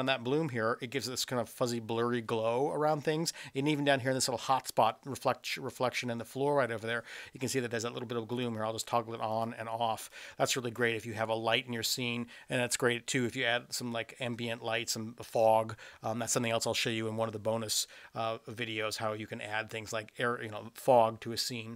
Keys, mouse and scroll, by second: 8.5 click, 9.5 click, 10.1 click, 10.6 click.